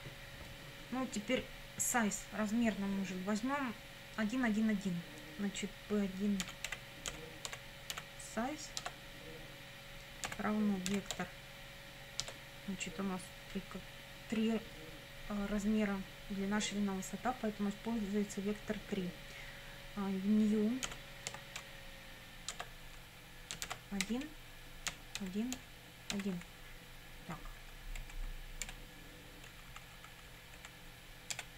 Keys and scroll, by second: 6.2-8.4 typing, 8.8 Tab, 10.3 =, 10.9 v, 11.2 e, 12.3 Tab, 20.9 ., 21.3 n, 22.5 Tab, 23.7-26.1 typing, 27.6 Right, 28.7 BackSpace, 29.5 Left, 31.4 BackSpace.